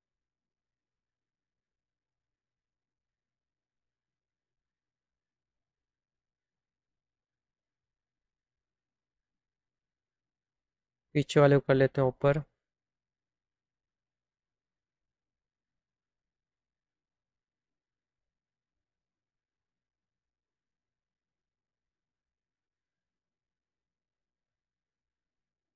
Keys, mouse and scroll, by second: 3.1 click, 10.9-14.1 drag, 16.6 right click, 20.1 click, 21.0-22.2 drag, 23.2 click.